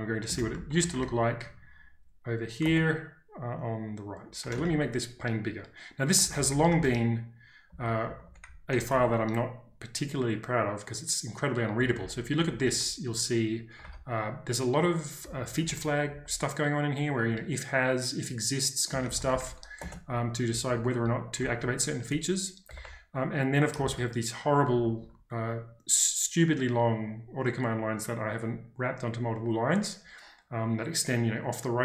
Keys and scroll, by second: 0.1-3.2 typing, 4.6 ctrl+space, 4.7 z, 6.1-9.5 typing, 11.5-12.8 typing, 13.8 ctrl+d, 15.2-16.2 typing, 17.2 typing, 18.6-22.8 typing, 24.7 typing.